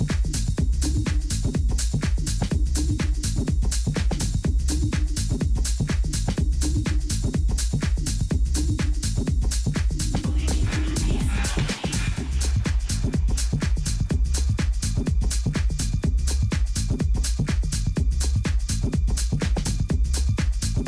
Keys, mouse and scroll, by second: 3.4-5.3 middle drag, 8.7 Tab, 9.1-11.4 middle drag, 12.1 z, 12.9 middle click, 20.5 Tab.